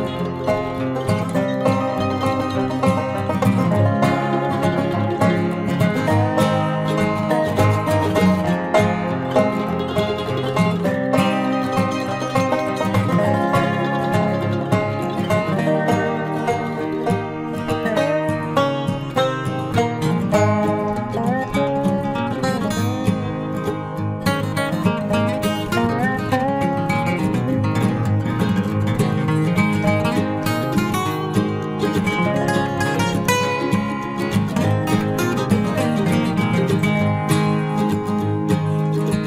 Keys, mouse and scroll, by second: 0.4 ctrl+r, 2.0 ctrl+r, 4.5 ctrl+r, 6.0 ctrl+r, 7.8 ctrl+r, 10.0 ctrl+r, 12.2 ctrl+r, 14.3 ctrl+s, 19.1-20.4 drag, 20.4 middle click, 21.2 ctrl+r, 22.7 ctrl+r, 23.8 ctrl+r, 27.0 ctrl+r, 28.7 ctrl+r, 32.0 ctrl+r, 33.5 ctrl+r.